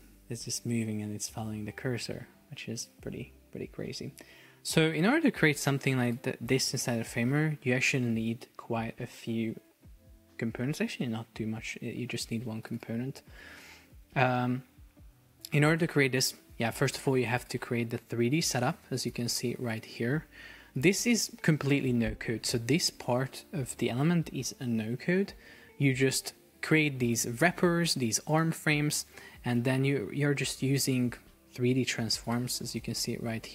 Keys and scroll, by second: 5.4 Escape, 33.1 shift+Down.